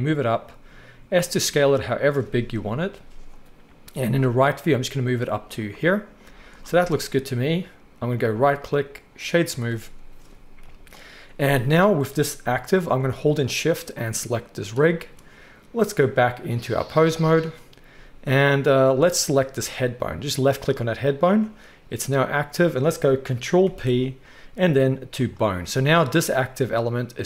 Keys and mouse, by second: 0.9 s, 2.5 KP_3, 4.0 g, 6.3 z, 6.8-8.1 middle drag, 8.1-9.3 right drag, 9.3-12.4 drag, 10.6 KP_1, 12.4 right click, 12.4 g, 12.9-14.0 middle drag, 14.0 shift+click, 14.1-15.8 shift+middle drag, 15.8-19.5 drag, 17.9 z, 19.5-27.2 middle drag, 23.6 ctrl+p.